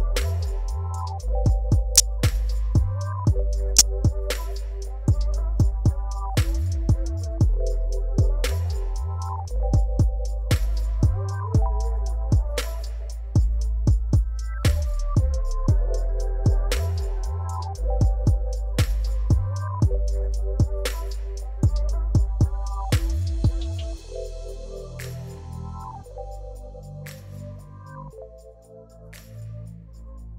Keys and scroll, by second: 2.8 7, 4.1 shift+z, 5.3 Tab, 6.5 s, 7.3 shift+z, 11.7 s, 12.0 shift+z, 13.0 s, 17.4 shift+z, 18.4 Tab, 18.9 g, 22.1 Tab, 22.5 shift+z, 23.2 1, 24.7 g, 28.9 ctrl+b.